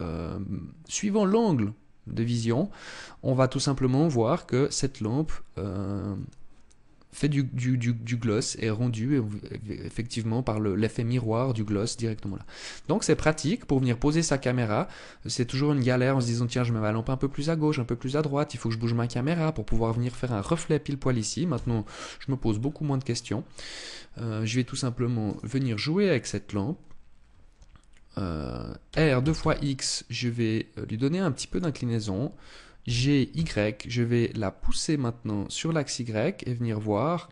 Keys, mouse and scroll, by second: 11.8 middle click, 12.9 middle click, 21.1 KP_0, 21.9-22.5 scroll down 3, 22.7 scroll up 1, 24.1 scroll down 1, 24.8 right click, 25.8 right click, 28.5 r, 31.1 click, 32.4 g.